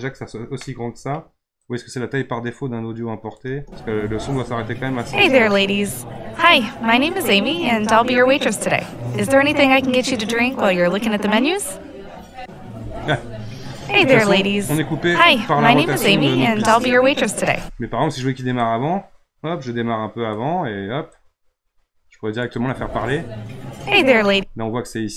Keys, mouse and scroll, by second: 0.0 scroll down 5, 0.6-1.7 middle drag, 1.7-3.4 drag, 3.4 space, 17.5 space, 18.6-22.5 drag, 22.5 space, 24.3 space.